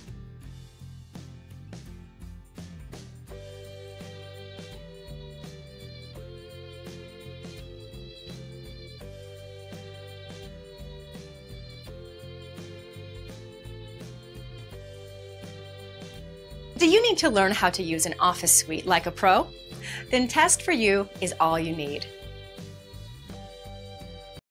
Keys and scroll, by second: 8.4 Delete, 9.3 Return.